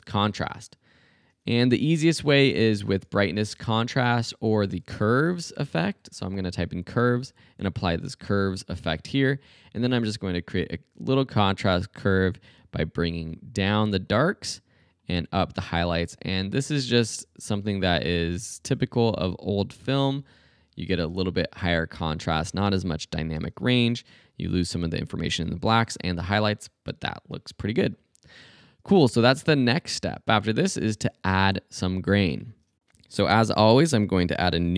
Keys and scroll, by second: 0.0-0.3 typing, 1.6 super+a, 1.9 super+b, 2.0-6.5 typing, 4.8 super+a, 23.4 space, 28.5 space.